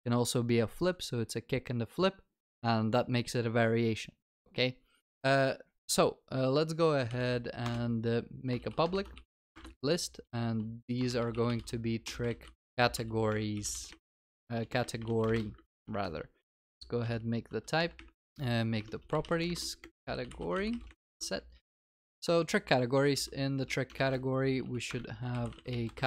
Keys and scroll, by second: 7.6 Return, 16.0 alt+Return, 18.2 ctrl+c, 18.3 ctrl+v, 21.1 ctrl+s, 24.8 ctrl+s.